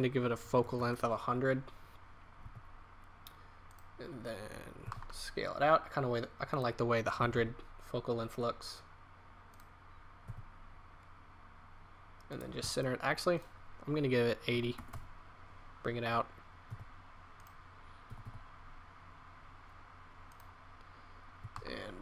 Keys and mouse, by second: 0.7 KP_0, 2.4 g, 4.8 g, 7.1 r, 10.2 g, 13.3 click, 16.6 g, 18.0 r, 21.4 g.